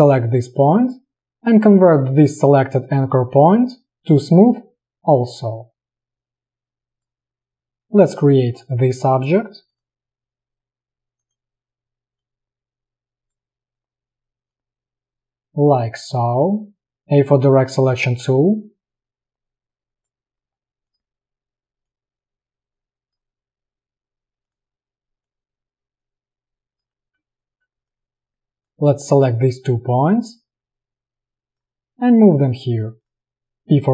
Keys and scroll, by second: 17.2 a, 33.3 p.